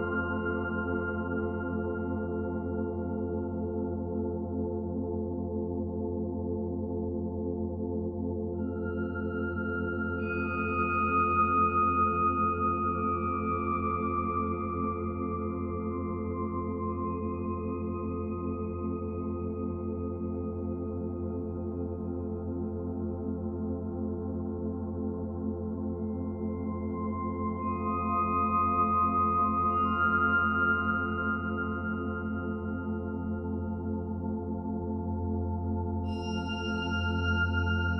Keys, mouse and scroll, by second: 0.3-0.7 scroll up 1, 0.7 click, 0.9 g, 1.5 shift+click, 2.2 Delete, 2.8 scroll up 1, 2.9 ctrl+s, 3.1-3.5 scroll down 2, 3.5-4.5 shift+middle drag, 4.5-4.9 scroll up 3, 4.9 shift+middle click, 5.2-6.3 scroll up 1, 6.3-7.6 scroll up 3, 6.6 shift+middle drag, 7.6-10.4 middle drag, 10.4 click, 10.7 Tab, 11.3 1, 11.5 click, 11.9 shift+d, 12.5 alt+middle click, 12.8 alt+middle click, 13.3 g, 14.6 e, 14.9 g, 16.7 z, 17.1 shift+middle click, 17.5 a, 18.1 click, 19.0 l, 19.9 p, 20.4 Tab, 20.7 click, 21.0 g, 21.6 Tab, 22.0 Tab, 22.6 click, 23.7 click, 24.3 Tab, 25.2 click, 25.5 g, 26.1 g, 27.5 click, 27.7 b, 28.2 g, 29.1 click, 29.4 g, 30.0 g, 30.8 e, 32.1 e, 34.4 click, 34.5 g, 35.3 click, 36.1 e.